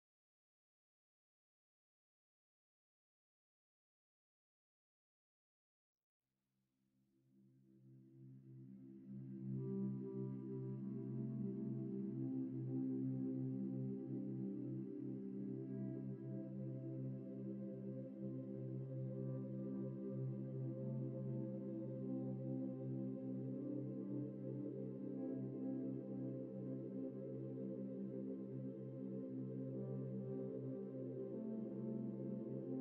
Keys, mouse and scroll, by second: 0.0-0.6 typing, 0.5 scroll up 1, 0.7 shift+middle click, 1.0 scroll up 1, 1.3 shift+middle click, 1.9 typing, 7.3 typing, 15.0 typing, 17.3 typing, 17.4 shift+middle click, 18.2 middle click, 19.6 shift+middle click, 20.0 typing, 21.4 typing, 21.8 right click, 22.8 typing, 26.0 scroll down 1, 26.4 scroll up 1, 27.1-27.8 typing, 27.6 double click, 31.3-31.7 scroll up 1, 31.7 typing.